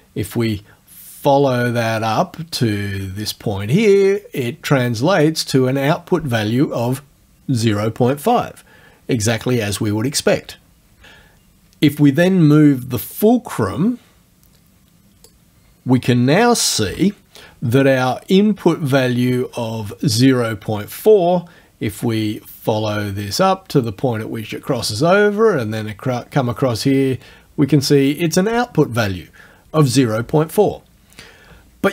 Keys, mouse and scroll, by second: 2.6 click, 4.7-5.8 drag, 13.1-15.5 drag, 16.8 F9, 18.9-20.1 drag, 23.5-24.6 drag, 26.3-28.0 drag.